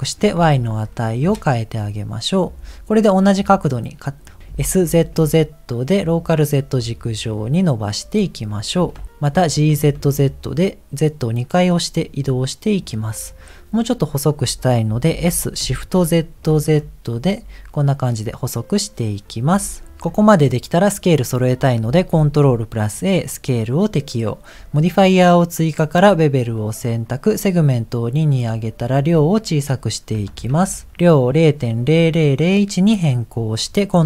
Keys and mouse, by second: 0.0-1.4 drag, 4.5 s, 8.7 g, 9.4 g, 15.1 s, 22.1 ctrl+a, 26.4 click, 27.4 click, 29.0-30.9 drag.